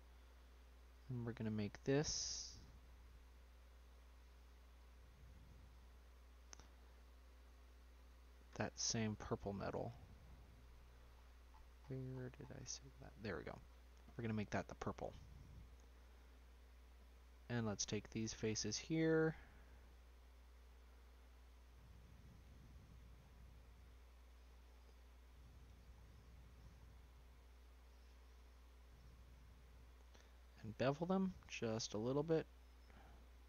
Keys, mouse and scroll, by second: 0.3-1.8 drag, 1.8-2.6 scroll down 3, 2.6-3.9 scroll up 2, 3.9 click, 4.7-6.7 drag, 6.7-7.7 scroll down 5, 7.7-11.2 drag, 14.1 click, 14.5-16.6 middle drag, 16.6 scroll up 4, 16.8 middle click, 17.7 click, 19.0 click, 20.0 ctrl+click, 21.9 click, 22.8-23.5 scroll down 6, 23.5 shift+middle click, 24.0-24.6 scroll up 1, 24.6-25.9 drag, 25.9-27.5 scroll up 5, 26.3 shift+middle click, 27.5 shift+click, 28.1 shift+click, 28.8 ctrl+click, 29.3 ctrl+click, 30.5 ctrl+b.